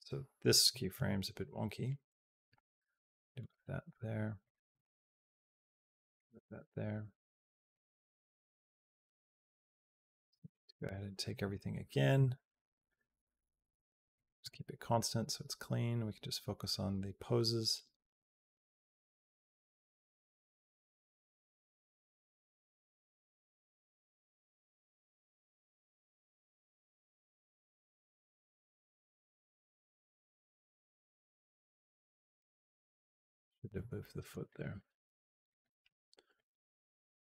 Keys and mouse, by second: 0.8 Down, 2.4 g, 4.2 click, 4.8 g, 7.6-9.2 drag, 9.8 middle click, 10.6 middle click, 11.1 middle click, 11.9 b, 12.7-14.1 right drag, 14.2 click, 14.8-32.2 drag, 34.0 middle click, 34.6 middle click, 35.3 middle click, 36.2-37.2 drag.